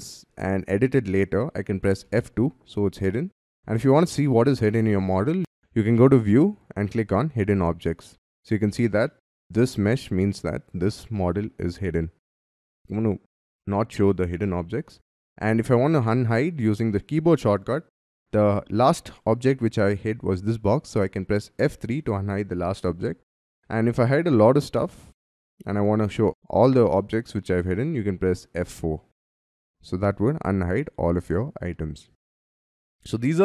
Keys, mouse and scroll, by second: 0.6-1.2 scroll down 3, 2.1 F2, 8.1-8.5 scroll up 10, 9.0 middle click, 14.9-16.8 scroll down 6, 21.6 F3, 22.8 scroll down 6, 23.3 middle click, 23.8-25.2 scroll down 6, 28.6 F4, 31.7 scroll down 5, 32.2 Escape, 32.2 scroll up 5, 32.4 Escape, 33.1 middle click.